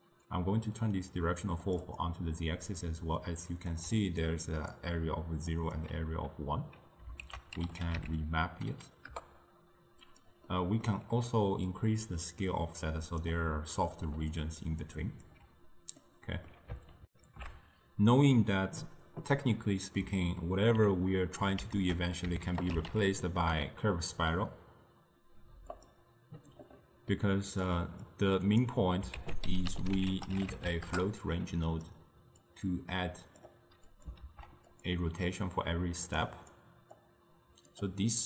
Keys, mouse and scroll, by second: 3.3 middle click, 4.3-9.2 drag, 9.2 ctrl+a, 11.9-15.3 drag, 15.3 d, 23.6 ctrl+a, 33.5 click, 34.3 shift+d, 37.8-38.2 drag.